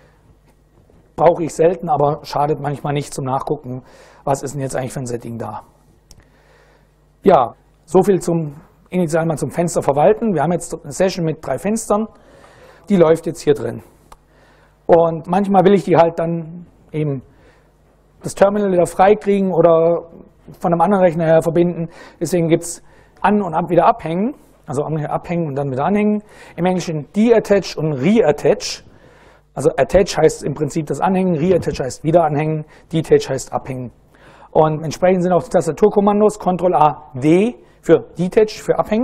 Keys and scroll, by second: 12.9 super+Right.